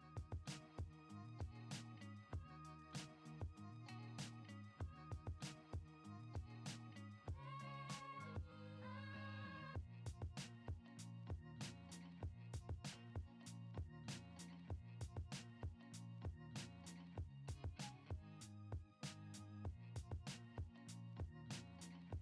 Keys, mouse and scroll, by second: 1.7-2.1 drag, 2.1 middle click, 3.0 middle click, 4.7-6.8 drag, 9.1 middle click, 10.7-13.0 drag, 13.6 middle drag, 14.9 shift+a, 19.9-20.9 drag.